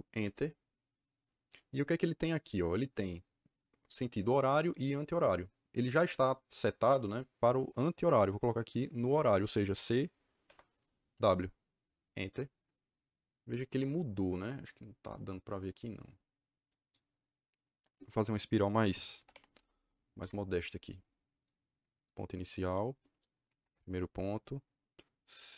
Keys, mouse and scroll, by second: 0.1 Return, 10.4 c, 11.0 w, 12.1 KP_Enter, 13.6 KP_Enter, 18.8-20.2 typing, 21.9 click, 23.4 KP_1, 23.5 KP_Enter.